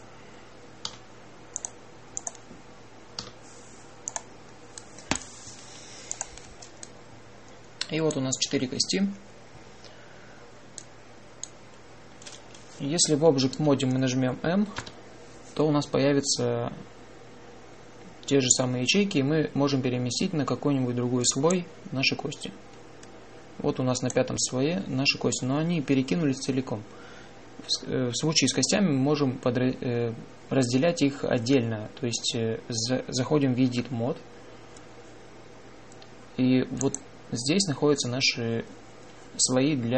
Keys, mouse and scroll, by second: 0.0 e, 1.7 e, 4.1 w, 14.4 Tab, 15.6 m, 24.8-26.5 drag, 34.6 Tab, 37.7-39.6 drag.